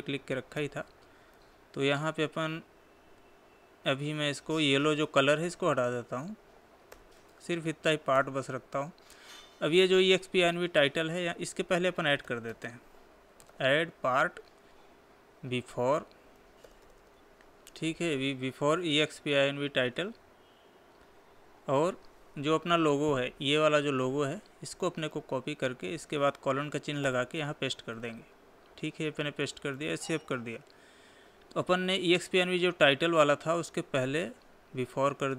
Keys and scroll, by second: 1.9 ctrl+v, 6.8 Down, 25.6 ctrl+c, 28.4 ctrl+v, 30.3 ctrl+s.